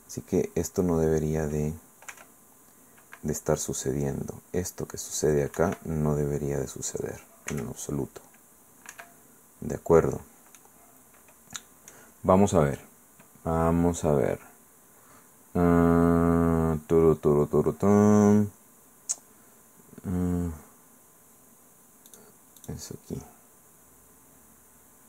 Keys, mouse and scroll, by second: 1.0-1.6 scroll down 2, 2.1 r, 5.6 Escape, 7.5 r, 8.9 Escape, 10.6-12.1 drag, 12.1 middle click, 22.1 click, 22.6 click.